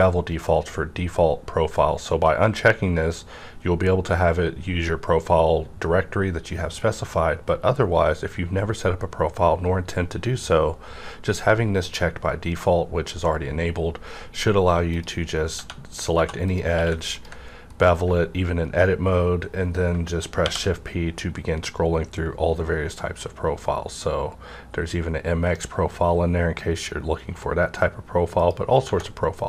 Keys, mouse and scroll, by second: 14.8 click, 16.1 2, 16.4 click, 16.7 q, 17.1 ctrl+click, 17.8 scroll up 1, 20.4 shift+p, 21.1 scroll up 1, 22.5 scroll up 1, 23.8 scroll up 1, 23.9 scroll down 1, 24.6-25.2 scroll down 1, 25.2-25.6 scroll down 1, 25.6-26.0 scroll up 1, 26.0-26.5 scroll down 1, 28.4 click, 28.4 scroll down 1, 28.8 Tab, 28.8 -.